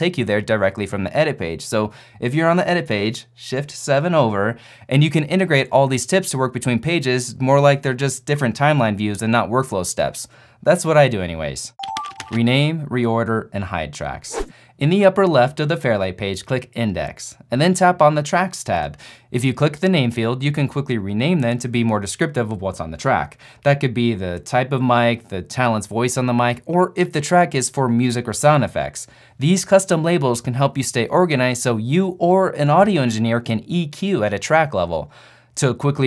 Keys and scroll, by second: 0.0 shift+7, 2.6 shift+4, 4.1 shift+7.